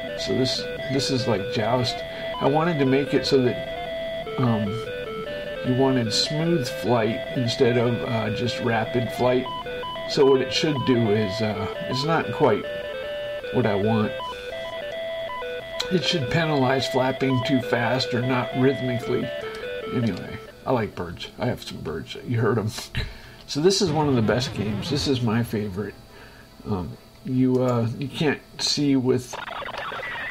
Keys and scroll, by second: 20.2 shift+Escape, 21.3 Right, 23.4 space.